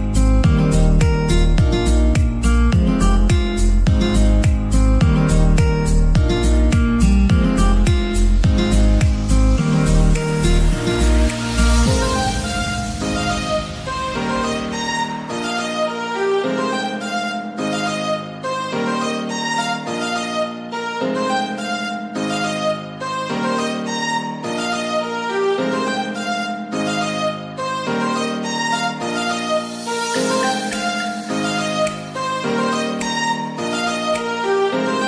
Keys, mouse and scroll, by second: 0.5-1.2 scroll down 5, 1.2-2.4 shift+middle drag, 2.4 scroll down 4, 2.6 shift+middle click, 3.2-3.6 scroll up 4, 3.6 shift+middle click, 4.2-4.8 scroll down 4, 4.8 click, 5.0 shift+a, 5.9 shift+a, 6.4 s, 7.6 click, 8.0 scroll down 2, 8.2 g, 8.5 z, 10.1 click, 10.6-11.6 scroll down 3, 10.8 middle click, 11.6-13.6 middle drag, 11.6 KP_0, 13.6 g, 13.9 z, 15.3 click, 15.9-16.2 scroll down 3, 16.3-19.3 middle drag, 17.5 scroll down 1, 18.4-19.2 scroll down 3, 19.3 Tab, 20.0-21.9 drag, 21.9 e, 22.1 z, 24.7 click, 25.2 middle click, 26.1 g, 26.5 z, 26.8 click, 27.1-27.5 scroll up 1, 27.5 Tab, 28.2 ctrl+3, 28.5 middle click, 29.4 click, 29.5 right click, 29.8 Tab, 30.7 ctrl+r, 31.5-31.8 scroll up 1, 31.8 ctrl+r, 31.8 click, 32.1 right click, 32.4 s, 34.7 click.